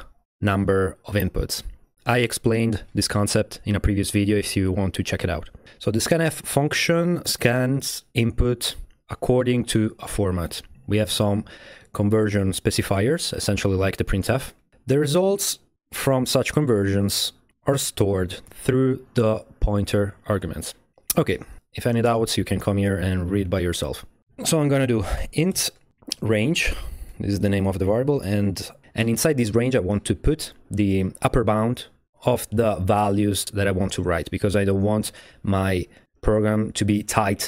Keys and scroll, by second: 24.2 Tab, 24.8-27.9 typing, 28.7 Return.